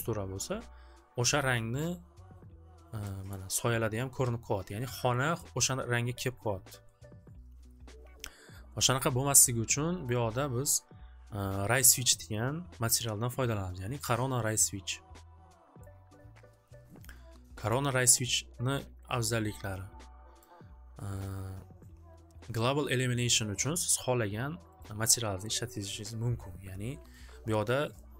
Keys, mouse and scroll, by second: 1.8 scroll, 3.4 scroll, 4.0 scroll, 5.0-5.4 scroll, 10.0 scroll, 10.2 click, 10.8 click, 15.8 click, 17.7 click, 20.4 click, 24.9 click.